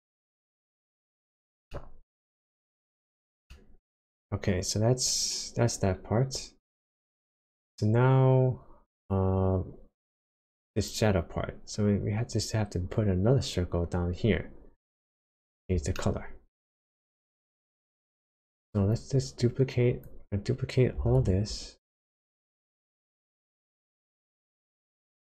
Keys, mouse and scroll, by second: 1.7 shift+middle click, 2.7 shift+scroll up 1, 3.4 shift+middle click, 8.9 click, 14.9 click, 15.3-15.7 scroll down 1, 15.9 shift+middle click, 18.9 click, 21.2 shift+d, 23.1 click.